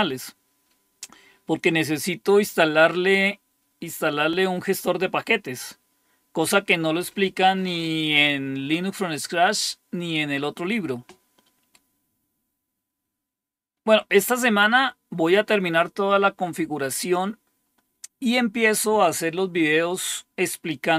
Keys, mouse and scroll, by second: 13.0-17.5 scroll up 1, 17.5-20.9 scroll down 5.